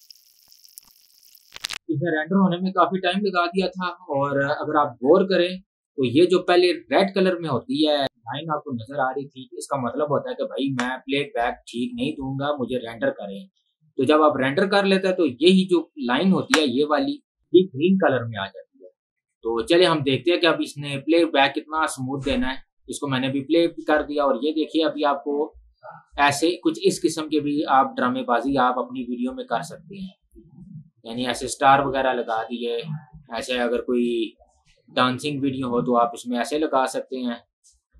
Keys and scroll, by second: 1.9 ctrl+w, 6.3 ctrl+2, 22.4 space.